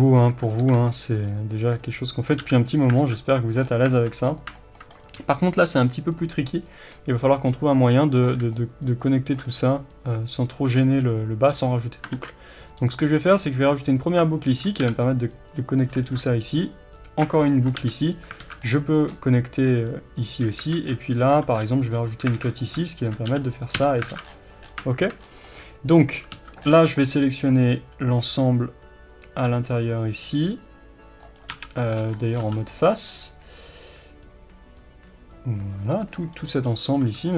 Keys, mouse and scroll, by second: 0.6 s, 1.3 click, 2.5 f, 3.0 alt+a, 3.6-4.3 scroll down 1, 4.3-4.6 scroll up 1, 4.6-13.8 shift+middle drag, 5.0-6.9 scroll up 1, 8.3-8.6 scroll down 1, 9.5-10.5 scroll up 1, 12.2 ctrl+r, 13.8 click, 14.9 f, 16.1 ctrl+r, 17.1 click, 17.9 f, 18.4 alt+a, 18.6-19.0 scroll down 1, 19.1 scroll up 1, 19.7 click, 20.8 alt+a, 21.5 ctrl+r, 22.4 alt+a, 22.6 click, 23.4 f, 24.1 alt+a, 24.3 scroll down 1, 25.0-32.0 shift+middle drag, 25.2 scroll up 1, 27.1 c, 32.0 3, 33.0 c, 36.4-36.7 scroll down 1, 36.7-37.3 scroll up 1.